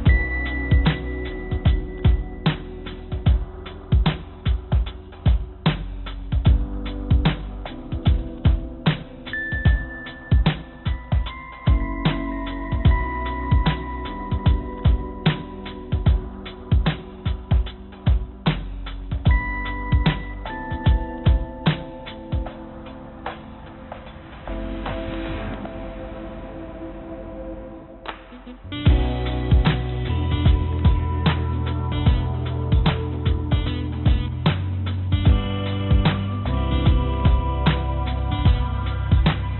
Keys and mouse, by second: 2.9 click, 3.6-5.5 drag, 6.4 shift+d, 9.6 shift+d, 12.5 s, 15.3 click, 16.8 s, 18.1 g, 20.4 click, 21.7 click, 23.0 g, 25.7 g, 27.8 click, 28.2-29.0 drag, 29.6 g, 31.8 g, 35.3 click, 37.4 z, 38.6 g.